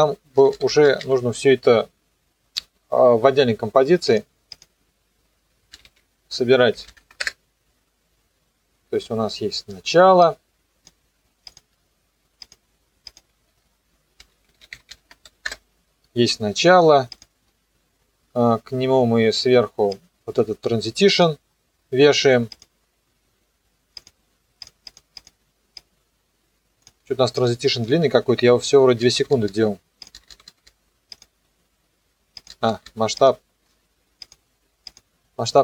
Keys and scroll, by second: 5.5-7.4 typing, 13.9-15.4 typing, 15.4 Return.